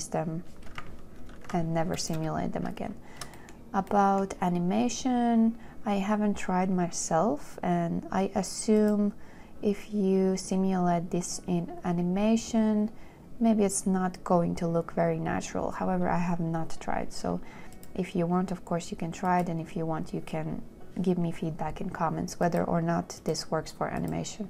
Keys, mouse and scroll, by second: 1.3-2.0 typing.